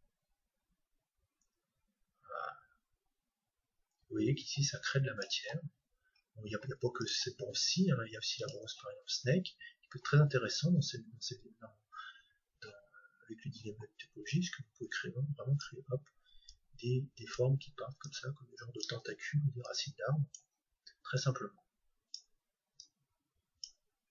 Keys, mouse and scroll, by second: 5.6-6.1 scroll down 1, 6.1-7.0 scroll up 1, 7.0-8.9 drag, 13.2-16.2 middle drag, 14.3-16.2 drag, 16.5-24.1 drag.